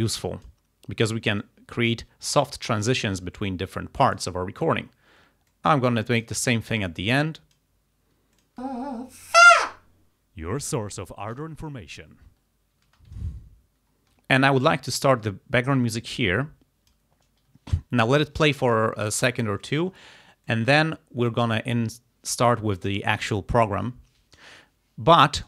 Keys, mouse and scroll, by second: 1.5 click, 4.1 click, 5.6 click, 7.0 click, 8.4 click, 8.7 space, 12.9 space, 13.2 ctrl+scroll down 2, 13.7 ctrl+scroll up 2, 15.8-17.2 drag, 17.7 ctrl+scroll down 2, 19.5 ctrl+scroll up 2, 20.6 click.